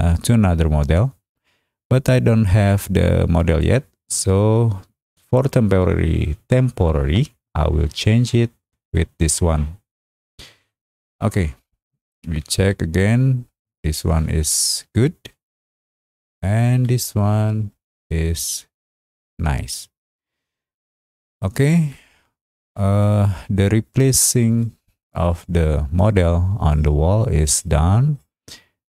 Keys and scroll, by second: 11.5 space.